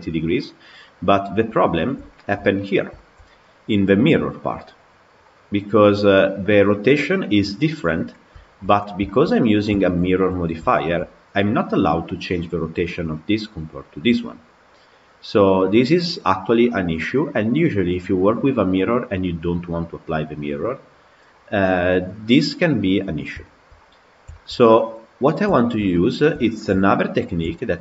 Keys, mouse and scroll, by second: 0.0-0.7 scroll down 2, 0.7-7.8 middle drag, 7.8-8.8 scroll down 8, 8.2 shift+middle click, 8.9-10.0 shift+middle drag, 10.0-10.6 scroll up 6, 10.6-11.7 shift+middle drag, 11.7 click, 14.2 click, 15.1 click, 15.8 click, 16.5 click, 17.2 click, 17.9 click, 18.5 click, 21.0 scroll down 5, 21.5-22.8 scroll up 5, 22.8-23.2 scroll down 2, 23.3 shift+middle click, 23.5-24.2 scroll down 7, 24.2 shift+middle click, 25.0-25.4 scroll up 3, 25.4-26.9 shift+middle drag, 26.9-27.3 scroll up 5, 27.3-27.8 shift+middle drag.